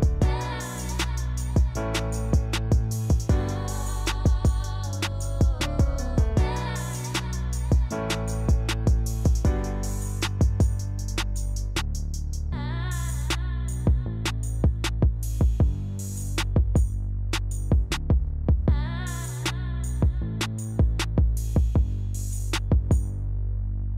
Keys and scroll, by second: 2.4-4.2 typing, 11.2-12.7 typing, 13.9 f, 16.3 1, 16.4 Return, 19.9-21.5 typing, 22.8 j.